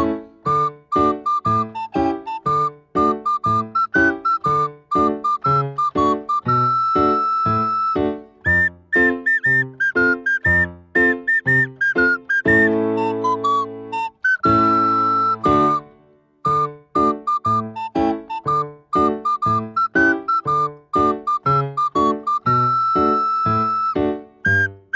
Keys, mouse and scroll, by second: 0.1 click, 2.6-4.1 drag, 5.1-8.2 drag, 8.9-11.1 drag, 11.1-13.6 middle drag, 13.6 click, 14.7-16.3 scroll down 1, 16.3-18.2 scroll down 1, 18.2-18.9 drag, 18.9-19.7 scroll down 2, 19.7-22.7 drag, 23.9 click.